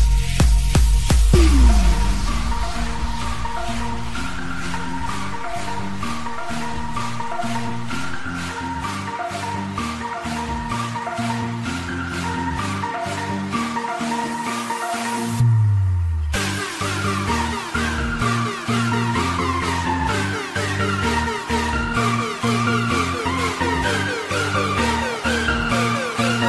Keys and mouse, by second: 0.7 shift+click, 2.3 shift+click, 3.4 shift+click, 4.7 shift+click, 5.4 shift+click, 5.4 KP_1, 5.6 KP_0, 9.2 Return, 9.2 click, 9.2-10.2 typing, 9.4 Return, 9.4 click, 10.2 Return, 10.2 click, 13.1 Return, 13.1 click, 13.1 space, 13.1 KP_0, 13.1 KP_1.